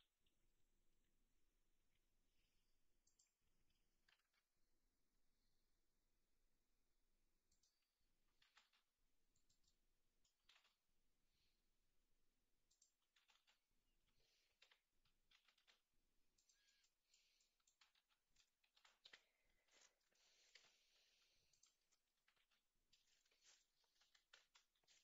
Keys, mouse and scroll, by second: 4.1 r, 8.2 g, 10.0 middle click, 10.4 g, 13.0 g, 16.8-17.4 middle drag, 18.7 shift+d, 22.3 r.